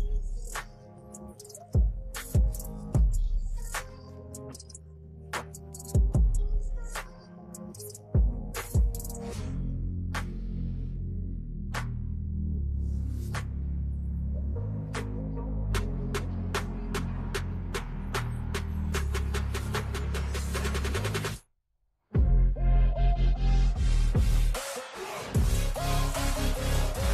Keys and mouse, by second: 4.8 click, 6.4 click, 7.4 click, 8.6 click, 9.5 click, 11.8 click, 14.6-16.1 drag, 16.5 click, 17.8-20.9 drag, 22.4 click, 23.3 click, 26.0 alt+shift+click.